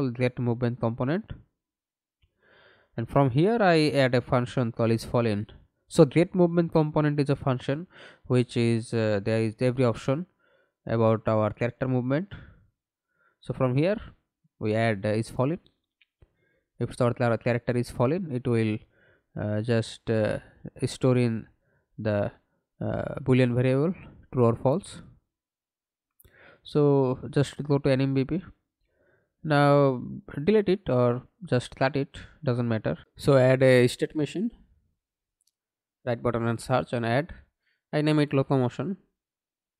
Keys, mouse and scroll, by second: 2.0 right click, 6.4-7.8 typing, 7.8 Return, 12.4 Left, 12.6 Left, 14.9 right click, 19.1-19.8 scroll down 1, 19.8 right click, 23.8 double click, 26.3 right click, 29.5 right click, 32.5-36.0 typing, 36.4 Return.